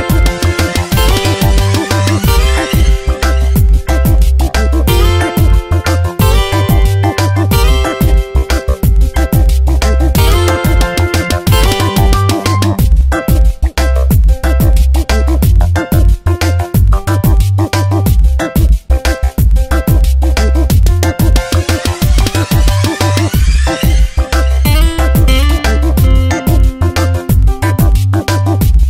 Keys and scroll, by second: 3.6 ctrl+z, 5.4 Return, 6.0 ctrl+shift+[, 7.8 ctrl+t, 9.9 ctrl+z, 11.7 ctrl+g, 12.4 Return, 12.8 ctrl+g, 20.2 Return, 24.7 ctrl+t, 27.2 Return.